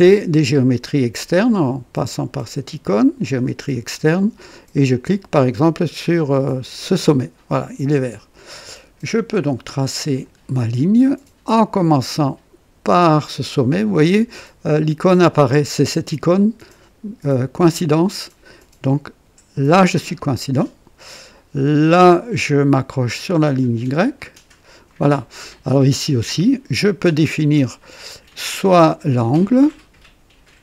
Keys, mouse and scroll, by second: 6.7 click, 10.0 click, 20.1 click, 24.1 click, 24.9 right click, 28.3 click, 29.5 click.